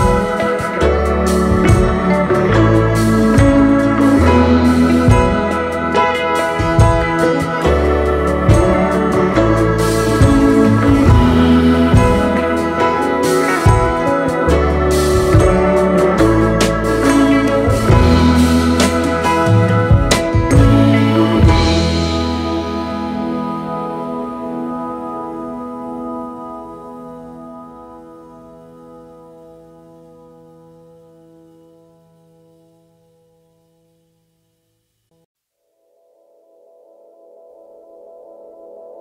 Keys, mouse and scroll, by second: 0.1 space, 0.6 alt+scroll up 2, 2.5 alt+scroll up 1, 3.1 alt+scroll down 1, 3.3 space, 8.1 alt+scroll up 2, 10.9 typing, 14.6-15.3 scroll down 1, 15.3-16.1 typing, 15.4-16.1 scroll down 1, 17.6 Return, 23.8 alt+Right, 24.2 alt+Right, 24.6 alt+Right, 24.9 alt+Right, 26.1 alt+Right, 27.8 alt+scroll down 3, 28.1 space, 30.3 right click, 33.1 alt+scroll down 1, 33.4 space, 33.9 space, 35.7 Right, 37.0 space, 37.1 double click, 37.6-38.4 space.